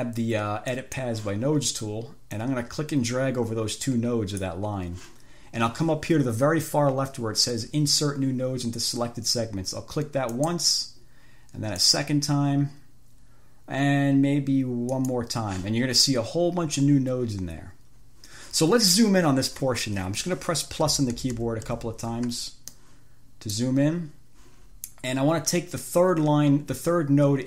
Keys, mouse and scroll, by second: 1.0 click, 2.6-4.9 drag, 10.6 click, 12.0 click, 15.2 click, 21.1 =, 23.0-24.0 drag.